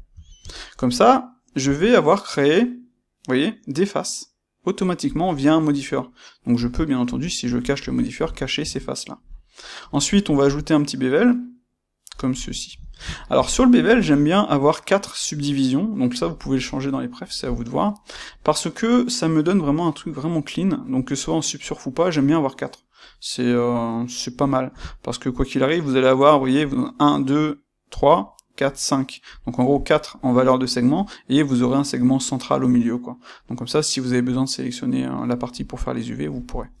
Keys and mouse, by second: 18.5 middle click, 24.0 middle click, 24.8-36.8 shift+middle drag.